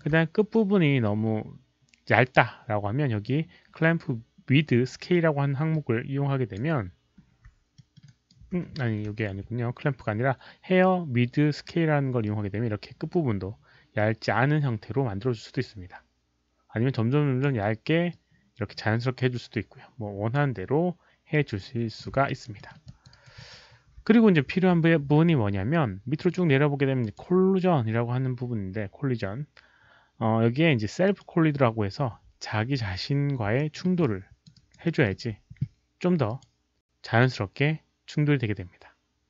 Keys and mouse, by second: 4.0 alt+click, 4.0 alt+middle click, 4.0 alt+right click, 5.7 alt+click, 6.5 alt+middle click, 6.5 alt+right click, 7.2 alt+click, 7.2 alt+right click, 7.7 alt+middle click, 8.0 alt+right click, 8.3 alt+click, 9.0 ctrl+z, 9.3 ctrl+z, 9.3 alt+right click, 9.3 alt+middle click, 9.3 alt+click, 12.2 ctrl+z, 12.2-17.4 drag, 12.2 alt+right click, 12.2 alt+middle click, 18.1-20.3 drag, 19.8 ctrl+z, 21.3-21.9 drag, 22.2 alt+right click, 22.5 alt+middle click, 22.8 alt+click, 23.1 alt+right click, 23.3 alt+middle click, 27.0 alt+click, 31.0 alt+click, 31.0 alt+middle click, 31.0 alt+right click, 33.5 alt+middle click, 34.0 alt+click, 34.5 alt+right click, 34.8 alt+middle click, 36.2 alt+click.